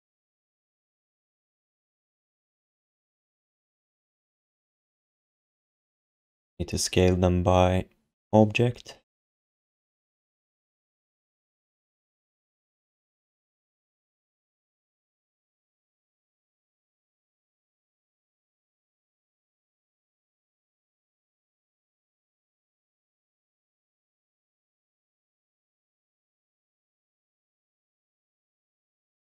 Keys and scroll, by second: 0.0 q, 2.2 r, 4.4 ctrl+z.